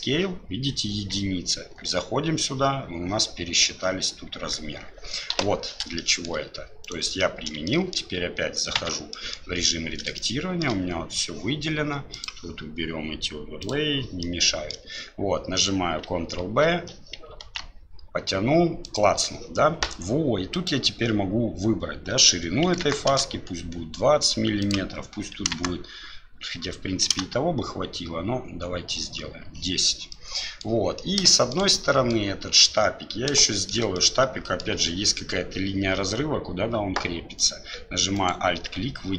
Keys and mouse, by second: 1.6 Tab, 5.3 Delete, 6.0-6.3 shift+drag, 7.2 click, 7.7 shift+click, 9.1 click, 10.2 shift+click, 12.2-14.0 drag, 14.2 middle click, 16.4 ctrl+v, 17.3 ctrl+b, 20.6-23.8 drag, 30.2 click, 31.4 shift+click, 31.7 click, 33.5 shift+click, 34.1 click, 37.4 right click, 38.2 alt+right click.